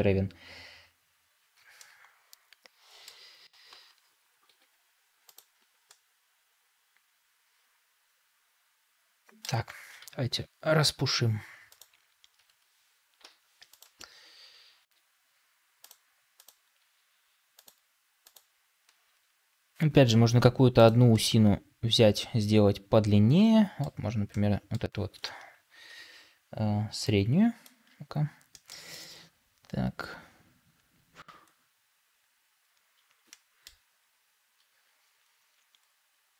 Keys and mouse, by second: 1.7-3.0 middle drag, 4.4 g, 5.8-9.3 middle drag, 9.9 KP_7, 13.1 ., 14.7 r, 16.7 r, 18.9 r, 21.0-23.8 middle drag, 24.2-24.7 middle drag.